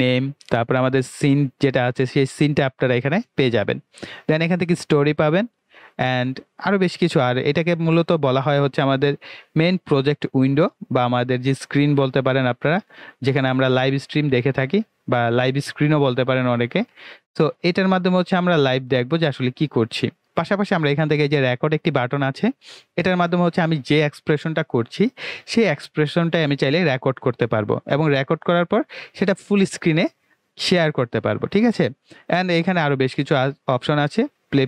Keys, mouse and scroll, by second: 0.6 click, 0.7 typing, 3.1 click, 8.1 typing.